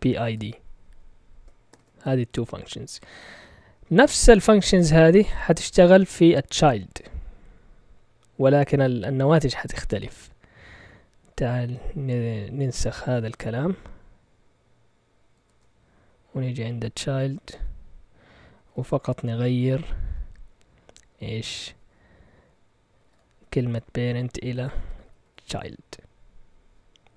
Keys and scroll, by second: 0.0-2.1 typing, 4.4 Up, 4.9 Down, 10.7 Escape, 15.3 shift+y, 16.3 Down, 16.5 Down, 16.8 Down, 17.5 p, 18.5 Right, 18.5 typing, 18.7 Right, 18.9 Right, 19.0 Right, 19.1 Right, 19.3 Right, 19.4 Right, 19.5 Right, 22.7-23.5 typing, 24.5-25.8 typing.